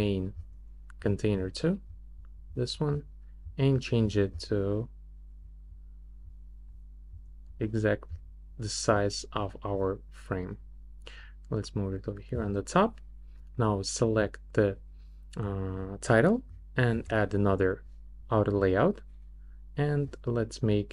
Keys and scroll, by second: 16.9 shift+a.